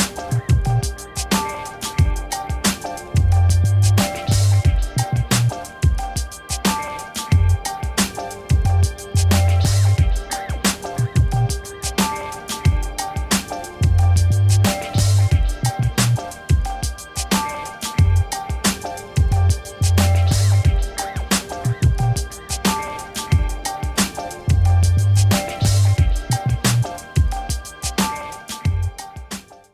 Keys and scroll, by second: 4.4-6.3 typing, 6.7 Return, 15.3 ctrl+-.